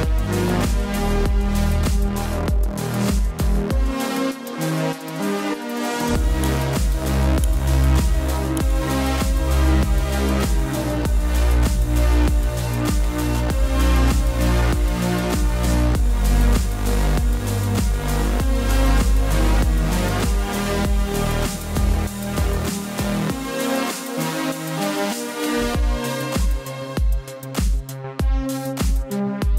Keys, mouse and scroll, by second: 12.6 click, 21.4 click, 28.4 click.